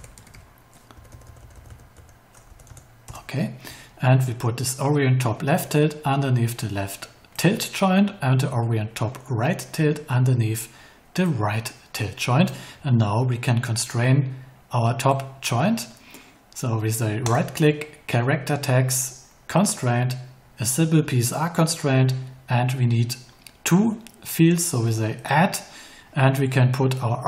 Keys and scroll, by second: 0.9 Right, 2.4 BackSpace, 3.0 Return.